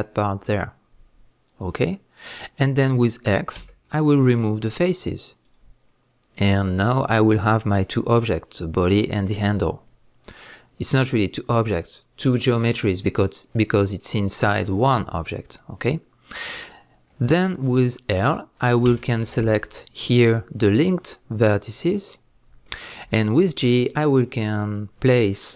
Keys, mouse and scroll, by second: 25.4 click.